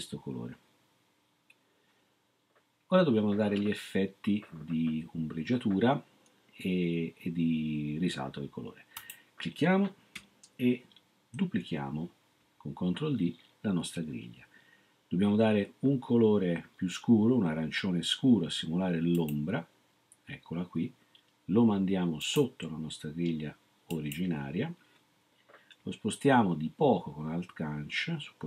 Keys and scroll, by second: 11.3 ctrl+d.